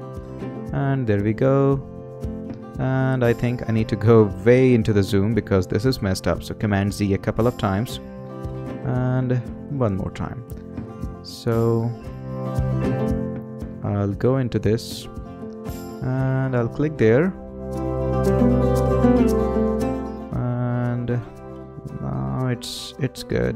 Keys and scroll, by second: 7.0 super+z, 9.7 super+z.